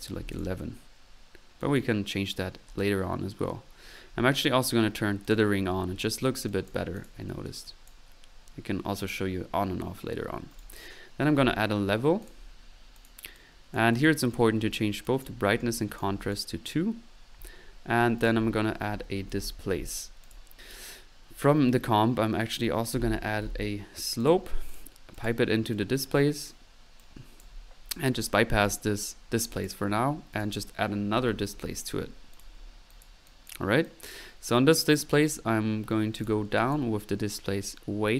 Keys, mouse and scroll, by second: 0.3 typing, 1.6 click, 5.2 click, 6.5 click, 7.9 click, 8.3 typing, 8.4 middle click, 10.5 right click, 11.0-11.9 typing, 12.3 click, 18.2 right click, 18.6-19.8 typing, 22.4 middle click, 22.8-23.9 typing, 24.4-25.2 drag, 27.0-27.4 drag, 27.8 click, 27.8 middle click, 28.6-29.1 drag, 29.2 middle click, 29.5-30.2 drag, 30.3 click, 30.5 right click, 30.8-32.0 typing, 32.4 click, 32.8-34.1 drag.